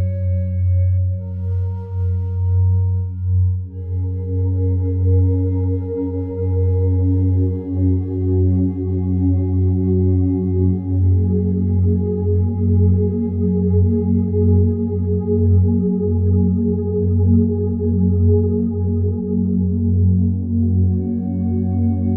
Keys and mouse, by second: 0.0 click, 2.0 click, 2.8 click, 3.4 click, 5.2 click, 6.1 click, 6.3 click, 8.0 click, 10.3 click, 12.1 click, 12.7 click, 13.7 click, 16.0 click, 17.4 click, 17.9 click, 18.9 ctrl+alt+click, 19.4 alt+click, 20.3 alt+click, 20.8 alt+click.